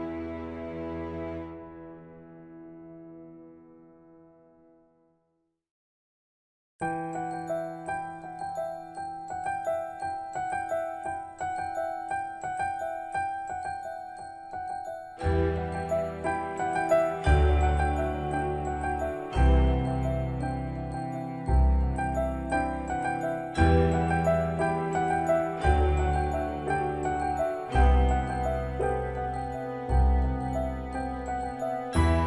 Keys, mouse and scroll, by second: 1.5-1.8 scroll up 1, 2.5 middle click, 3.2-3.7 scroll down 1, 4.5 click, 6.6-7.2 scroll down 1, 7.2-7.6 scroll up 1, 7.6 middle click, 8.4-8.8 scroll up 1, 9.5 typing, 10.7 typing, 10.8 click, 12.3 d, 14.6-17.3 typing, 19.5 Return, 21.2 o, 22.3 Return, 24.0 8, 24.7 Return, 25.6 click, 27.2 right click, 28.0 click, 29.1-31.3 typing, 31.6-32.2 drag.